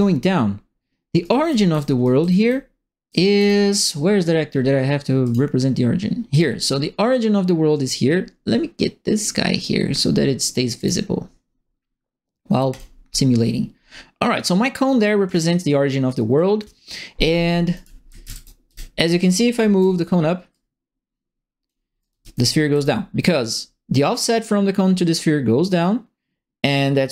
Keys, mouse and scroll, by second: 1.0-3.0 typing, 1.2-3.4 right drag, 5.2 click, 6.3 click, 9.1 click, 10.7 click, 12.7 click, 14.3 click, 17.5-19.5 typing, 17.7 right click, 19.2 click, 19.5 right click, 20.5-21.6 drag, 21.8-22.7 typing, 22.0 right click.